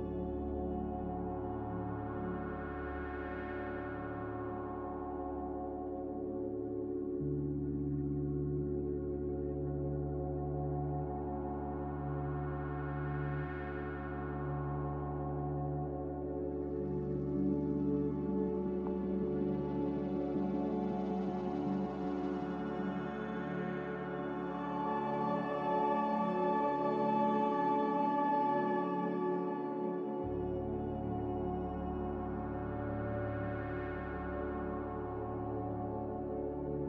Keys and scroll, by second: 2.9 q, 6.5 s, 17.1 z, 32.8 a.